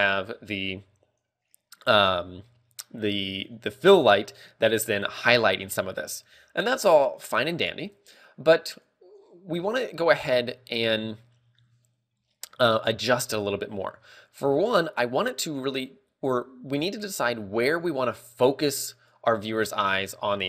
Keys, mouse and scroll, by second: 9.2 click, 9.7-10.4 scroll up 6, 10.2 shift+middle click, 10.9 shift+middle click, 11.3 scroll down 2, 11.8 shift+middle click, 13.9 shift+middle click, 13.9 scroll down 1, 18.8 click.